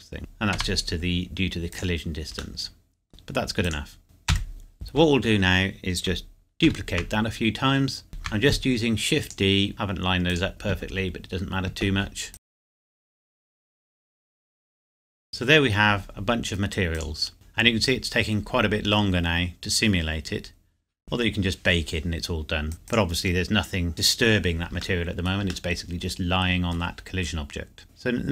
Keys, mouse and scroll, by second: 0.2 Tab, 1.7 click, 2.6 middle click, 3.6 click, 4.0 KP_7, 5.0 scroll down 1, 6.7 shift+d, 9.2 click, 9.7 y, 10.3 click, 11.1-12.3 scroll down 1, 12.3 click, 12.4-15.1 typing, 12.6 shift+click, 12.7 scroll down 1, 13.3 Escape, 13.5 click, 13.8 Escape, 14.2 click, 14.5 Escape, 14.9 shift+click, 15.0 middle click, 15.2 ctrl+s, 15.3 scroll up 1, 15.7 scroll down 1, 16.9 click, 17.3 middle click, 22.7 click, 24.8 scroll down 1, 25.7 middle click.